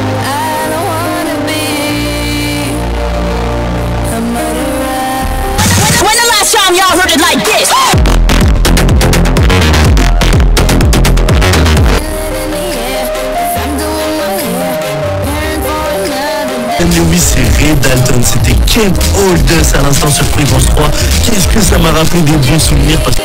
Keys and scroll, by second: 12.5 Page_Down, 23.1 Page_Down.